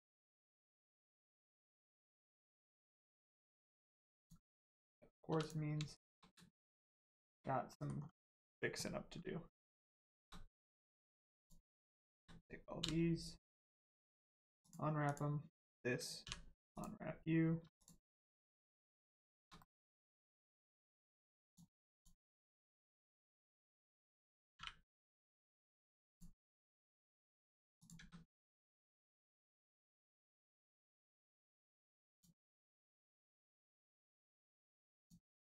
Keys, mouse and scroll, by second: 1.2 shift+middle click, 1.6 middle click, 1.7 middle click, 3.0 Tab, 3.4 middle click, 3.6 Tab, 4.1 click, 5.2 3, 5.4 click, 5.9 shift+click, 6.8 shift+middle click, 7.7 middle click, 8.0 scroll down 1, 9.6 middle click, 9.9 shift+middle click, 10.4 scroll up 1, 11.4 shift+click, 14.6 click, 16.2 u, 16.6 click, 17.7 click, 18.0 scroll down 1, 18.4 shift+middle click, 19.6 middle click, 19.6 middle click, 20.7 scroll up 1, 20.9 middle click, 21.4 click, 21.9 shift+click, 22.9 shift+middle click, 25.6 middle click, 26.0 click, 26.7 Tab, 27.7 click, 27.9 a, 29.0 click, 32.0 click, 34.9 click.